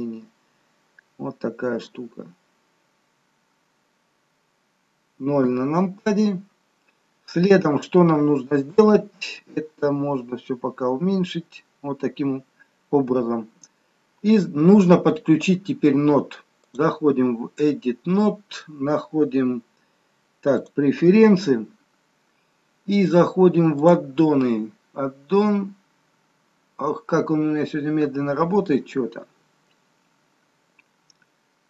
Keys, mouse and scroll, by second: 1.6-2.4 scroll down 4, 2.1-3.7 scroll up 3, 5.5 KP_0, 10.7-12.5 scroll down 6, 12.5-13.0 scroll down 3, 13.0-13.5 scroll up 1, 13.5-14.1 scroll down 1.